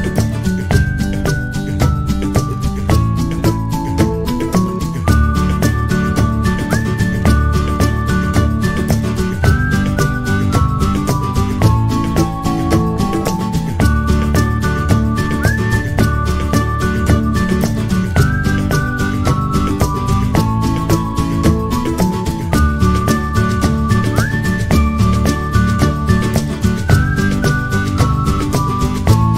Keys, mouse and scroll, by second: 1.6 click, 3.1 click, 4.4 click, 7.5-8.4 scroll up 1, 8.4 click, 12.7 click, 14.2 click, 14.4 click, 15.5 click, 15.7 click, 15.9 click, 17.4 click, 18.9 click, 19.8 click, 20.8 click, 21.7 click, 23.3 click, 25.4 click, 28.1 click, 28.6 click, 29.0 click.